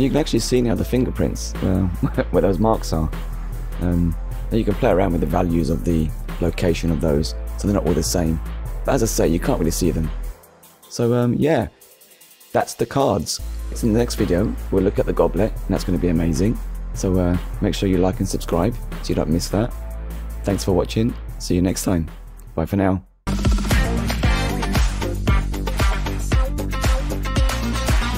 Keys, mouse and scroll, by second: 0.5 middle click, 1.6-2.0 scroll up 1, 2.3 middle click, 5.0 middle click, 6.9 scroll up 1, 7.8 middle click, 9.7 middle click, 11.2-11.6 scroll down 1.